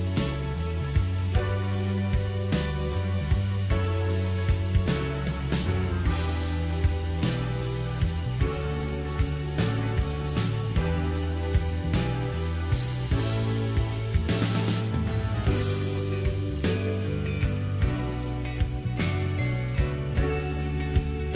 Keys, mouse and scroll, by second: 1.4 click, 2.0 scroll up 2, 2.4 Tab, 3.0-5.0 middle drag, 5.0 r, 12.9-15.1 drag, 15.1 Tab, 15.6-17.6 middle drag, 17.6 KP_1, 18.6 Tab, 19.7 click.